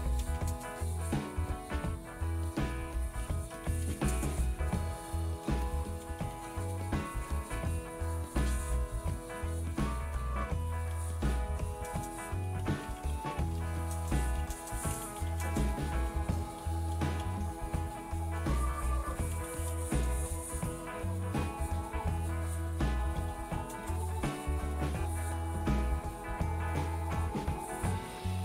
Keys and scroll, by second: 0.1-5.2 typing, 8.4-18.0 typing, 19.8-22.7 typing.